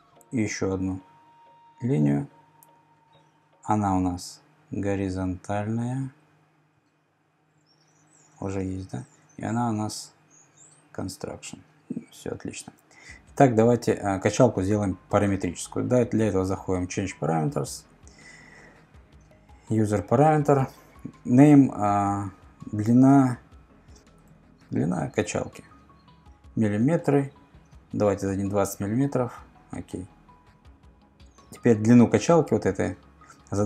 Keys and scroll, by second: 23.9-24.8 typing, 27.9-28.7 typing.